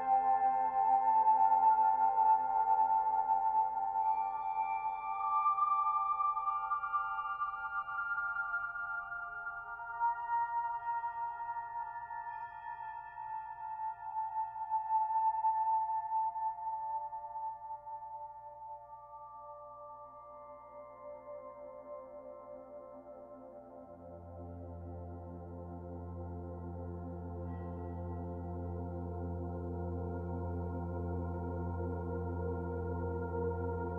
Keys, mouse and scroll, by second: 0.5 a, 0.8 g, 2.0 click, 2.3 l, 3.3 middle click, 3.6 scroll up 1, 3.8 g, 5.5 Tab, 5.8-6.8 scroll down 6, 6.8 ctrl+s, 7.5 alt+h, 8.0 ctrl+z, 8.4 ctrl+z, 8.6 ctrl+z, 8.8 ctrl+z, 8.9 ctrl+z, 9.1 ctrl+z, 9.3 ctrl+z, 10.7-11.0 ctrl+shift+z, 11.2 ctrl+shift+z, 11.4 ctrl+shift+z, 11.6 ctrl+shift+z, 11.8 ctrl+shift+z, 12.0 ctrl+shift+z, 12.2 ctrl+shift+z, 12.4 ctrl+shift+z, 12.8 ctrl+shift+z, 13.3-14.9 ctrl+shift+z, 15.8 Tab, 16.5 Tab, 16.7 click, 17.1 click, 17.5 click, 17.8 z, 18.2 click, 18.8 z, 19.1 scroll up 4, 19.9-22.9 shift+middle drag, 23.5 scroll up 1, 23.5 g, 26.0-27.1 middle drag, 27.1 g, 27.9 scroll down 1, 28.0-28.4 middle drag, 28.4 ctrl+s, 28.5-29.0 scroll down 9, 29.0 b, 29.4 o, 32.5 ctrl+s.